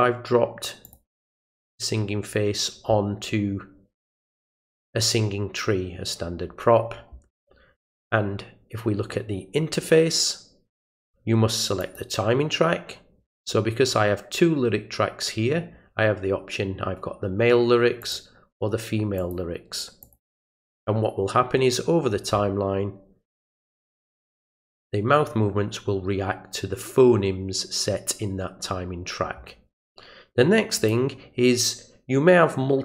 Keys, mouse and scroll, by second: 0.8 click, 11.8 click, 18.0 click, 19.2 click, 20.0 click, 30.8 click.